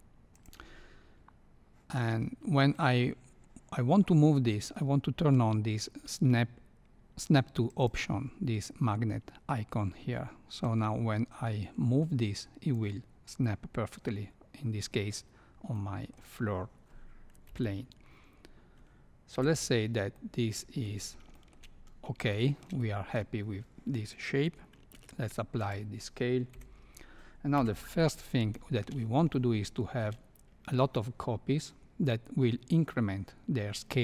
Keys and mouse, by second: 7.6 click, 10.6-12.7 drag, 15.7-16.1 middle drag, 17.4 KP_1, 19.3 KP_3, 20.1-20.8 middle drag, 21.3 shift+middle click, 22.3 shift+middle click, 22.8 middle click, 24.9 ctrl+a, 26.5 KP_1, 27.5 KP_3, 28.5-28.8 shift+middle drag, 29.4-30.0 shift+middle drag.